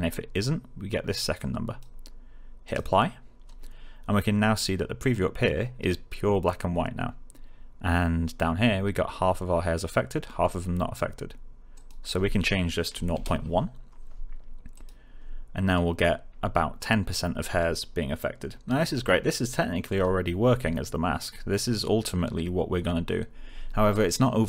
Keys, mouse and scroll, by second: 1.3-1.9 click, 11.7 click, 13.3 1, 14.7 click.